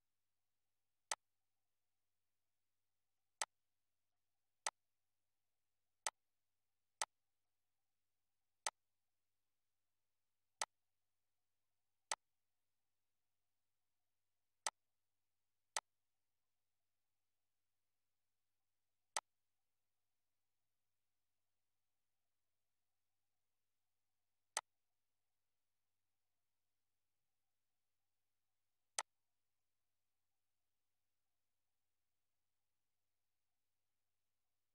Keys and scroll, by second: 20.7 Up, 25.5 Up.